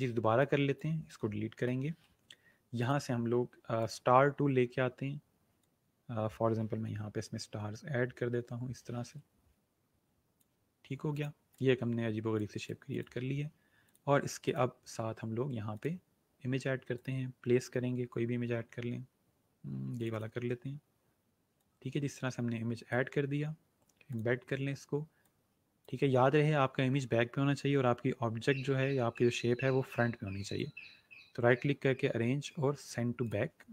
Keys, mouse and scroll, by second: 2.8 right click, 3.8 click, 6.8 Up, 11.1 click, 18.9-19.6 scroll down 1, 19.9 click, 30.4 right click, 32.8 click.